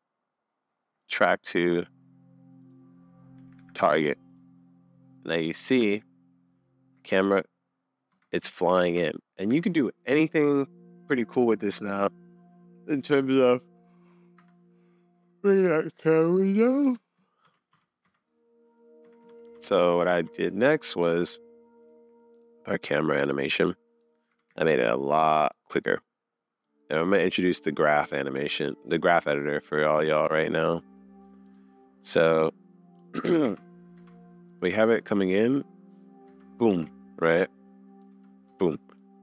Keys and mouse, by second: 4.1-6.1 drag, 6.9 space, 8.1 space, 8.7 shift+Left, 9.6 super+s, 14.4 space, 16.9 space, 17.5 shift+Left, 18.0 space, 19.1 space, 19.3 shift+Left, 20.1 super+s, 24.3 g, 26.6 click, 27.8 click, 29.4 middle click, 30.5 middle click, 31.1 click, 31.4 click, 32.0 click, 32.9 click, 33.4 space, 34.0 space, 34.6 click, 36.2 space, 36.7 space, 37.4 click, 38.1 space, 38.5 space, 39.0-39.2 drag.